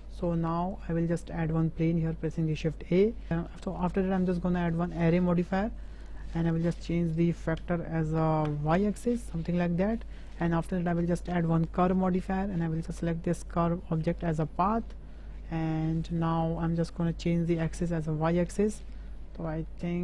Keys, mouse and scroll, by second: 0.3 `, 1.2 shift+a, 3.3 click, 4.7-5.3 drag, 6.5-9.6 drag, 10.8-12.2 drag, 13.5-14.6 drag, 16.9-17.8 drag, 19.5-20.0 middle drag.